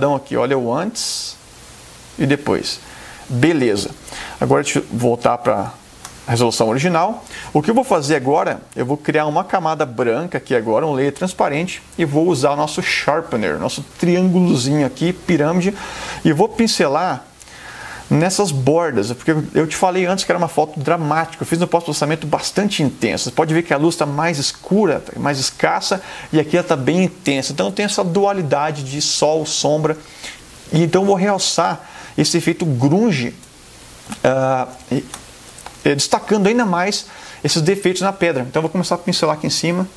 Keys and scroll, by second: 5.8 super+0, 17.5 ], 34.4 super+=, 35.6 super+space.